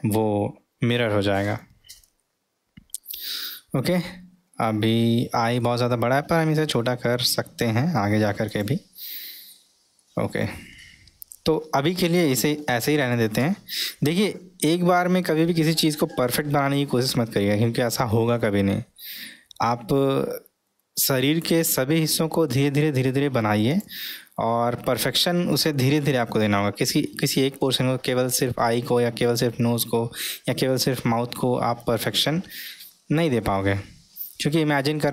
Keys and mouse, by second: 4.5-5.7 middle drag, 6.6 s, 10.0 middle click, 10.8-12.5 middle drag, 16.3 g, 22.5-23.3 middle drag, 24.8-25.7 middle drag, 26.1 middle click, 32.6-33.5 middle drag.